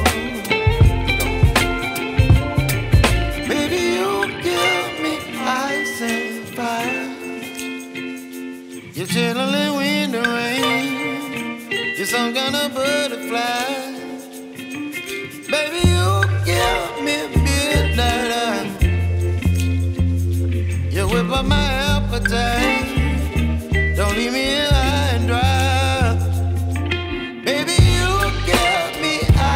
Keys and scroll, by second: 15.2 shift+Return, 15.8 Return, 19.2 b, 20.2 [, 24.4 0, 25.0 [.